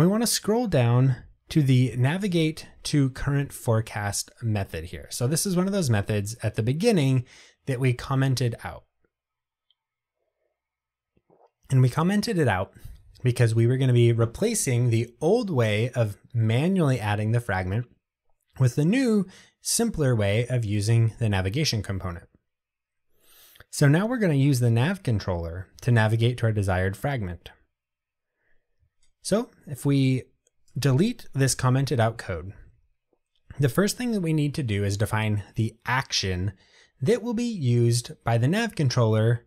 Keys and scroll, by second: 31.6 Delete, 33.2 Tab.